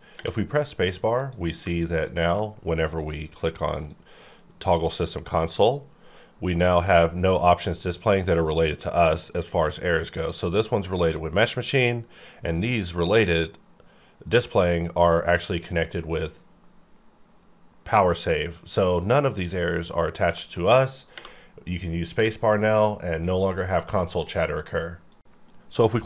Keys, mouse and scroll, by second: 0.2 space, 1.1 click, 3.0 click, 20.6 middle click.